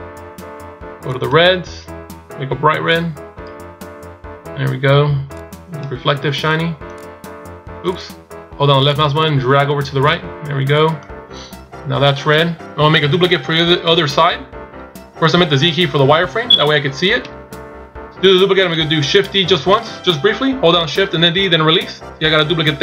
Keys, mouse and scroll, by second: 5.5 click, 9.0 click, 20.0 shift+d.